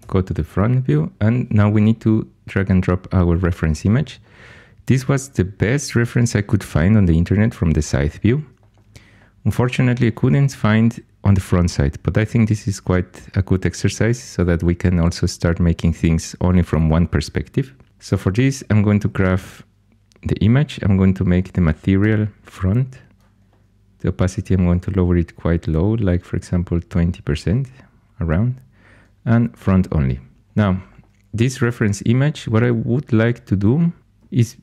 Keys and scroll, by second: 17.9 g, 22.0 m, 34.0 g.